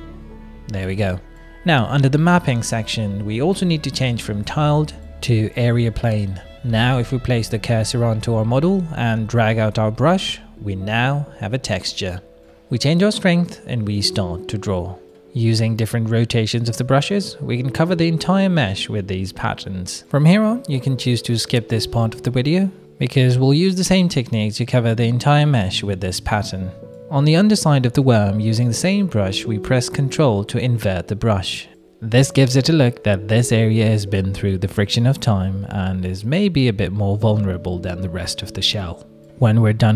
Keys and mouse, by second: 0.6 middle click, 2.9 middle click, 4.0 click, 7.6 middle click, 7.7 click, 8.7 click, 9.2 click, 10.1 ctrl+z, 10.2 shift+f, 12.5 shift+f, 12.5 shift+f, 12.9-13.9 drag, 14.1 middle click, 15.0 shift+middle click, 15.3 middle click, 16.9-18.1 drag, 19.9 click, 21.1 middle click, 21.6 middle click, 21.9 click, 23.2 click, 23.8 click, 25.8 shift+click, 25.9-27.0 drag, 29.4 click, 33.5 shift+middle click, 33.8 middle click, 34.0 click, 34.0 right click, 34.7 ctrl+click, 35.9 click, 35.9 middle click, 36.6 shift+click, 36.6 shift+middle click, 37.5 middle click, 37.7 middle click, 38.5 middle click, 39.5 click.